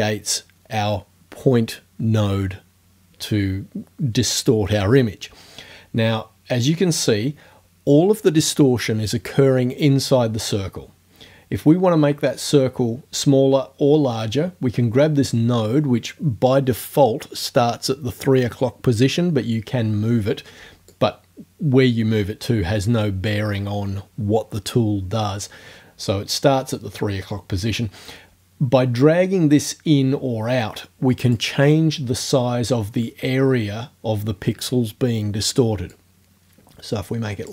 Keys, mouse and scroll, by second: 20.9-31.6 drag, 35.9-37.5 drag.